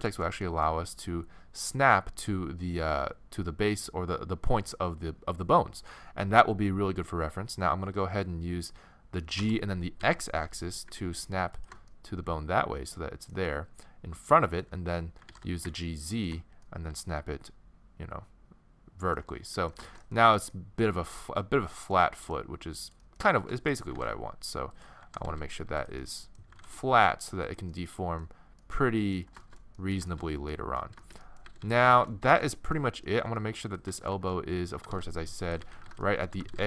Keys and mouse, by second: 9.4 g, 11.9-14.8 middle drag, 15.2 g, 18.6 middle click, 20.4-22.3 middle drag, 22.8-23.9 right drag, 23.9 g, 25.0 g, 26.5 g, 28.9 middle click, 31.5 a, 31.6 a, 32.5 middle click, 34.3 middle click, 34.8 g, 35.7 z, 36.4 g.